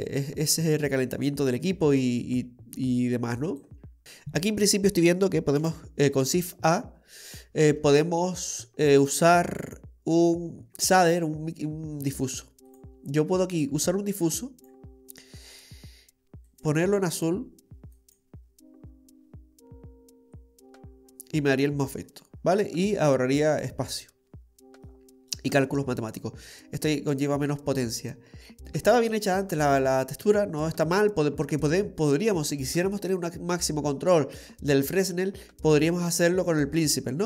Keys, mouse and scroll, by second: 0.2 middle click, 1.4 click, 4.0 Delete, 4.0 scroll down 8, 5.6 shift+a, 13.6 click, 15.4-16.5 scroll up 4, 16.5 click, 16.5 scroll up 2, 22.4-23.6 scroll down 4, 23.6-24.1 scroll down 4, 24.3-24.9 scroll down 6, 24.9 middle click, 29.4 scroll down 3, 30.0-30.3 scroll down 1, 32.1 scroll down 2, 32.7 middle click.